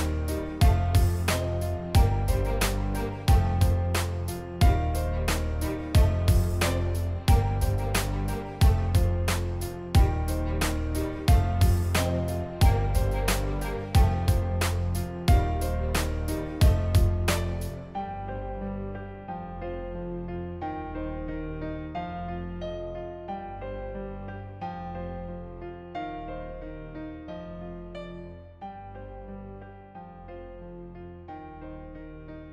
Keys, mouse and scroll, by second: 0.8 v, 0.9 click, 1.8 click, 2.4 click, 2.8 click, 3.6 click, 4.6 click, 5.3 click, 5.8 shift+x, 6.0 click, 6.9 click, 8.1 click, 9.6 click, 11.3 click, 13.4 shift+x, 14.1 click, 14.5 click, 14.7 click, 14.9 click, 15.0 click, 15.1 click, 15.3 click, 15.4 click, 15.5 click, 15.7 click, 15.8 click, 16.3 click, 16.4 click, 16.6 click, 17.0 click, 17.2 click, 17.5 click, 17.9 click, 18.0 click, 18.1 click, 18.5 click, 18.6 click, 19.3 click, 19.6 click, 19.8 click, 20.2 click, 20.3 click, 20.4 click, 20.5 click, 20.9 click, 22.0 click, 22.4 click, 22.5 click, 22.7 click, 23.1 click, 23.2 click, 24.5 click, 24.6 click, 24.9 click, 25.1 click, 25.5 click, 25.7 click, 25.9 click, 26.0 click, 26.2 click, 26.6 click, 27.0 click, 27.2 click, 27.3 click, 27.6 click, 27.8 click, 28.0 click, 28.1 click, 28.3 click, 28.4 click, 28.5 click, 28.8 click, 29.1 click, 29.2 click, 29.3 click, 29.4 click, 29.6 click, 29.9 click, 30.0 click, 32.0 click, 32.1 click, 32.2 click.